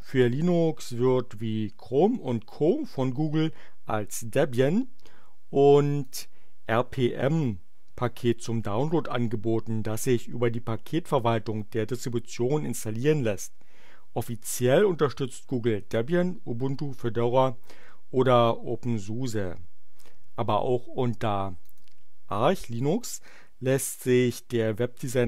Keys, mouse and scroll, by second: 6.0 click, 21.5 click.